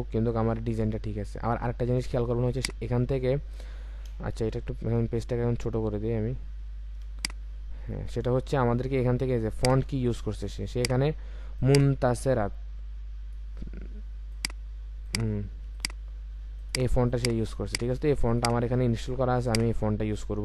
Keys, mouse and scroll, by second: 1.1 click, 4.6-5.4 ctrl+scroll down 1, 7.5 scroll down 1, 8.2-9.7 scroll up 1.